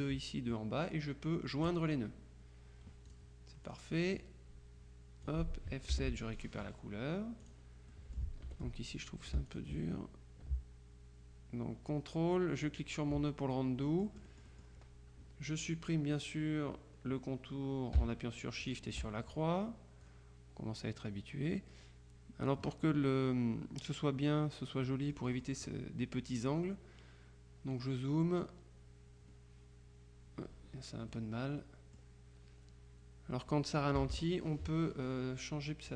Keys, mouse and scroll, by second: 1.7 click, 3.2-4.3 drag, 6.0 F7, 6.4 click, 7.5 click, 8.6 F2, 9.0-10.1 drag, 12.7 ctrl+click, 14.0-15.2 drag, 18.7 shift+click, 20.1-23.1 drag, 24.9-26.2 drag, 31.2-32.6 drag, 34.0 KP_Subtract.